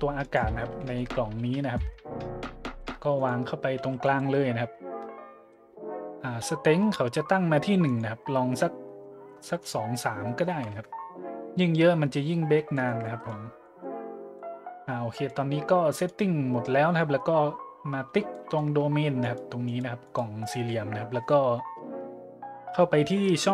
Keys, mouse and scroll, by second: 0.2 click, 0.9-1.7 shift+middle drag, 1.9 `, 2.7 g, 3.1-3.5 drag, 3.8 g, 4.0-4.4 drag, 5.3 middle click, 7.8 click, 10.5 KP_3, 10.7 KP_Enter, 12.3 middle drag, 12.7-13.4 shift+middle drag, 13.6-14.0 middle drag, 14.3-15.2 middle drag, 15.9-16.3 right drag, 17.6 middle click, 19.2 right click, 19.6 right click, 20.1-20.4 right drag, 20.5 scroll up 1, 21.4-22.1 scroll up 3.